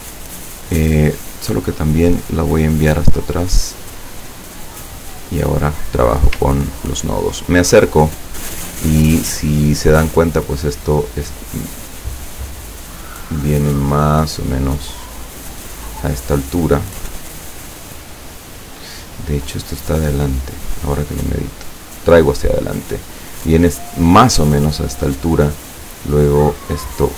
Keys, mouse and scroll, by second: 1.5 click, 3.7 click, 5.2 click, 6.6-7.1 ctrl+scroll up 2, 12.7-18.0 drag, 19.6 click, 20.0 click, 21.5 click, 24.0 click.